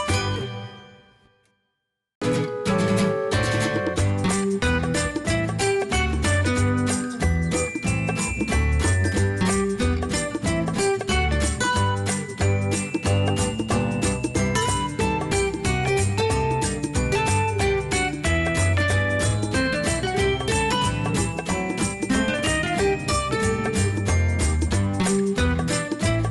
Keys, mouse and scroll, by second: 5.3 space, 8.9-11.8 drag, 12.8-18.1 shift+drag, 18.1 space, 20.1 click, 21.2 space.